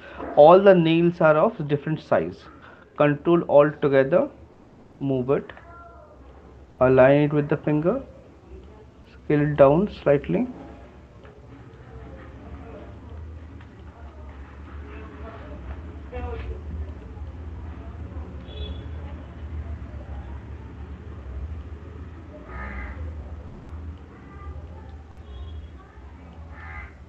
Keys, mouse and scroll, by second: 5.3 click, 7.8 click, 9.6 click, 14.2 shift+click, 15.5 right click, 17.2 click, 20.0 shift+click, 21.9 click.